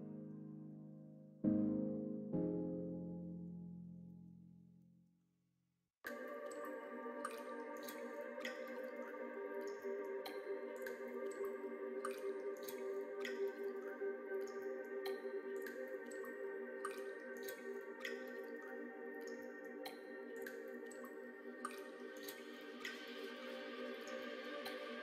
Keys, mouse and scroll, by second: 0.0 middle click, 0.6 middle click, 1.9-3.4 middle drag, 4.0 middle click, 4.8 middle click, 6.9 Tab, 8.7 h, 9.1 click, 9.7 Tab, 9.9 middle click, 10.6 ctrl+r, 13.2 ctrl+r, 14.9 alt+shift+click, 16.6 ctrl+b, 19.1 middle click, 19.9-20.9 middle drag, 21.7-23.0 middle drag, 23.7 middle click.